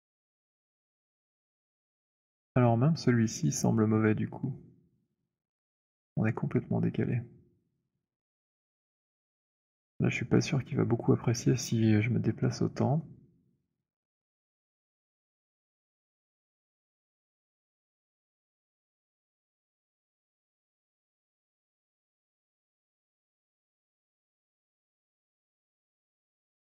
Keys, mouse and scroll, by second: 0.5 click, 2.6 alt+click, 13.5 middle click, 14.8 click, 21.1 click, 21.8 z, 23.8 alt+click, 24.6 alt+middle click, 26.3 alt+click, 26.3 alt+middle click.